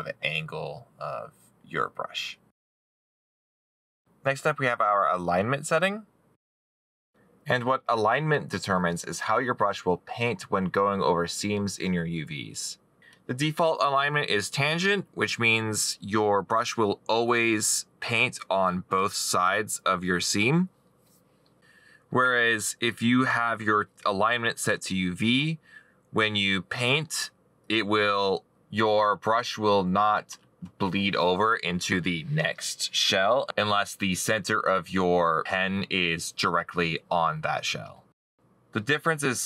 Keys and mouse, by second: 1.8 middle click, 9.0 middle click, 9.9 middle click, 10.0 right click, 34.7 middle click.